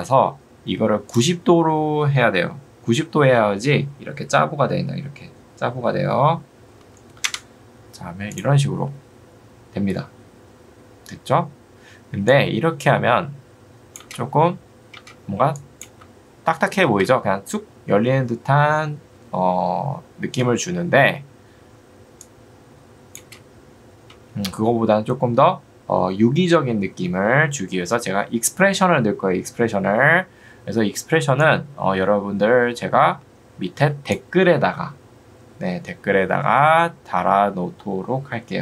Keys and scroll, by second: 6.5-7.4 typing, 14.1 space, 24.1 space.